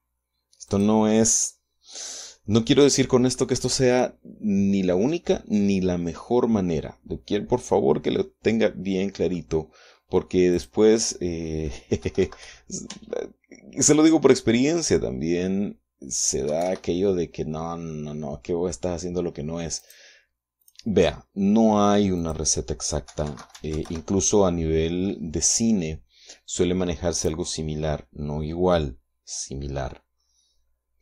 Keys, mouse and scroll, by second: 1.0 click, 2.6-3.8 middle drag, 4.4 scroll down 1, 8.5-9.8 middle drag, 10.9 click, 12.4 KP_1, 12.6 KP_Decimal, 12.8 KP_5, 13.2 Tab, 16.8 KP_1, 17.0 KP_Enter, 18.2-20.2 middle drag, 20.2 right click, 21.0 click, 22.6 click, 23.4 KP_1, 23.6 KP_Decimal, 23.8 KP_5, 23.9 Tab, 24.1 KP_1, 24.2 KP_Enter, 25.4-27.2 drag.